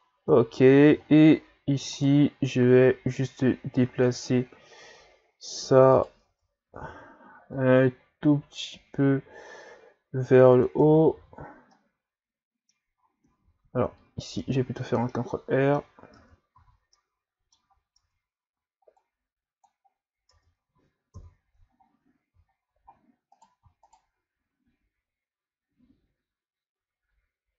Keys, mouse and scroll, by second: 0.0-1.4 scroll down 9, 1.9 right click, 5.9 right click, 6.3 Tab, 6.7 a, 6.9 a, 7.5-10.5 drag, 10.8 Tab, 11.1 a, 11.4-11.7 scroll down 5, 11.7-13.0 middle drag, 13.0 scroll up 4, 13.5 ctrl+z, 13.8 ctrl+z, 14.3 ctrl+z, 15.1-16.2 middle drag, 16.2 Tab, 16.6 a, 16.9 middle click, 17.7 scroll up 2, 18.0 Tab, 19.0 click, 19.9-20.3 scroll down 3, 20.3 Tab, 21.1 KP_3, 21.8 ctrl+scroll up 5, 22.5-23.3 shift+scroll up 6, 23.3 right click, 23.9 shift+right click.